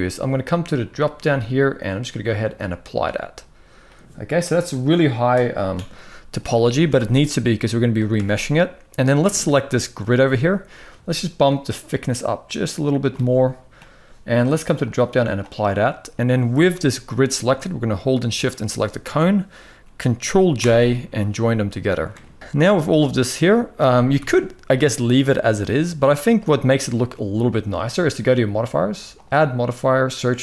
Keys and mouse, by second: 1.4-2.4 drag, 6.6 Tab, 7.9 Tab, 8.9 click, 9.8 shift+middle drag, 11.2-12.8 shift+drag, 14.6-15.1 drag, 15.6 middle drag, 16.5 g, 18.1 shift+click, 20.3 ctrl+j, 21.5-21.8 middle drag, 22.2 ctrl+s, 23.9 KP_1, 25.9 shift+middle click, 28.9-30.4 drag.